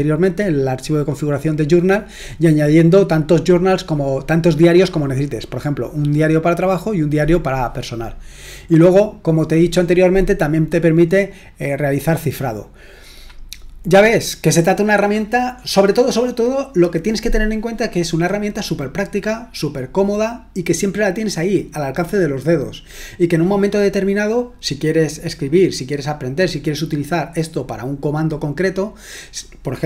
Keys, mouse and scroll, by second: 8.3-11.2 scroll up 1, 11.2-12.6 scroll up 1, 12.6-13.7 scroll down 2, 13.7-16.9 scroll down 1.